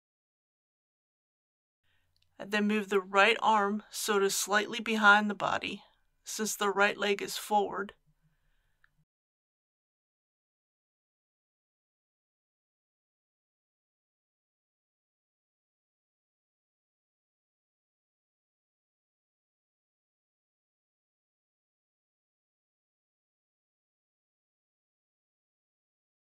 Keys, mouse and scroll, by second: 1.2-3.0 middle drag, 3.6 click, 4.7 KP_1, 7.0 r, 8.5 y, 11.6 click, 13.4-15.0 middle drag, 15.0 r, 15.3 x, 17.1 click, 19.0 KP_3, 19.9 shift+middle click, 21.1 click.